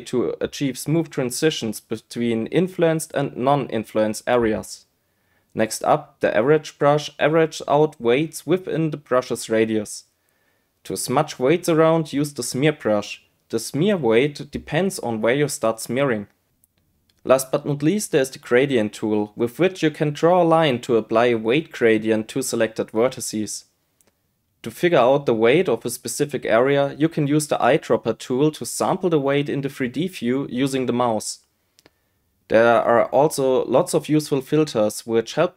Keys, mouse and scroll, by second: 0.0 click, 1.1-3.0 drag, 3.4 click, 3.8 click, 3.9 click, 4.1 click, 4.3 click, 4.4 click, 4.6 click, 4.8 click, 4.9 click, 5.1 click, 6.5 click, 7.5 click, 7.9 click, 8.2 click, 8.4 click, 8.7 click, 8.9 click, 9.1 click, 9.6 click, 9.8 click, 10.1 click, 10.3 click, 10.5 click, 10.7 click, 10.9 click, 11.1 click, 11.4 click, 14.2-15.4 right drag, 15.5 click, 16.0 click, 16.4 click, 16.7 click, 17.0 click, 19.4 click, 20.3-23.1 drag, 27.2 click, 28.8 click, 30.0 click, 32.6 click.